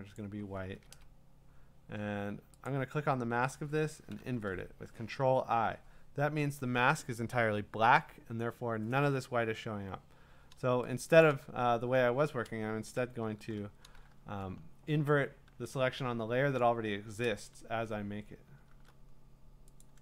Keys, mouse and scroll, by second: 0.2 click, 0.8 Return, 0.9 Return, 2.7 click, 4.1 ctrl+i, 11.2 click, 11.3 click, 12.7 ctrl+z, 13.3 ctrl+d, 18.7 alt+Tab, 19.8 click.